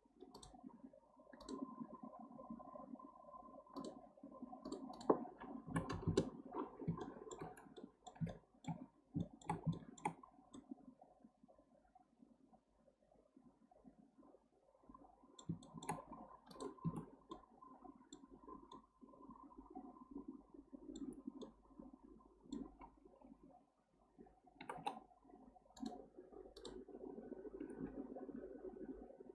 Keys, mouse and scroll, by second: 1.4 click, 3.8-7.0 drag, 7.0-8.9 shift+middle drag, 8.9 scroll up 1, 9.2-10.2 shift+middle drag, 10.2-10.5 scroll up 2, 10.5-13.6 middle drag, 15.6-16.0 shift+middle drag, 16.0-16.5 scroll up 1, 16.5 click, 16.9 Tab, 17.3-18.7 middle drag, 18.7-21.4 scroll up 1, 21.4-24.5 middle drag, 26.6 click, 27.6 g.